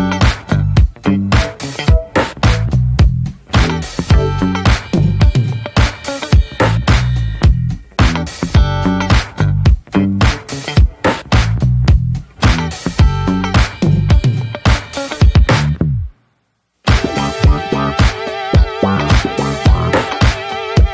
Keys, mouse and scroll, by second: 0.0-1.1 middle drag, 1.1 click, 1.5 `, 1.9 scroll down 1, 2.1-3.1 middle drag, 3.1 scroll up 2, 3.3 ctrl+s, 3.5-5.4 shift+middle drag, 5.4 ctrl+s, 5.7 Tab, 6.7-7.1 drag, 7.1 Tab, 7.4 middle click, 7.6 scroll up 1, 7.7-8.1 drag, 8.1 ctrl+s, 8.3 Tab, 8.9 Tab, 8.9 click, 9.2 shift+middle drag, 9.4 scroll up 2, 9.7 ctrl+s, 10.1 click, 11.3 shift+click, 11.4 shift+click, 11.9-13.1 shift+middle drag, 13.1 shift+click, 13.3 shift+middle drag, 13.5-14.1 scroll up 1, 14.1 shift+click, 14.4 shift+click, 15.5 ctrl+j, 15.9-16.7 shift+middle drag, 16.7 ctrl+s, 17.3 shift+h, 17.5-18.0 scroll down 2, 18.0-19.2 shift+middle drag, 19.2 ctrl+z, 19.2 scroll up 3, 19.5 drag, 19.7 scroll down 2, 20.3 click, 20.7 shift+click.